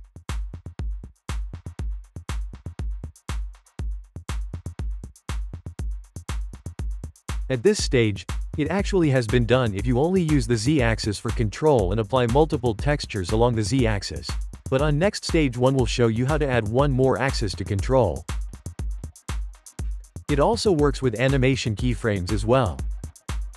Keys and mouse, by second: 0.9 g, 1.2 click, 1.3 g, 2.3 Tab, 3.5-5.1 drag, 5.1 n, 5.9-6.5 shift+middle drag, 6.5 click, 7.1 g, 13.2 click, 14.2 i, 14.6 click, 15.5 i, 15.8 click, 16.3 g, 17.1 click, 17.7 i, 18.0 click, 18.3 g, 18.9 click, 19.6 i, 20.0-23.5 drag.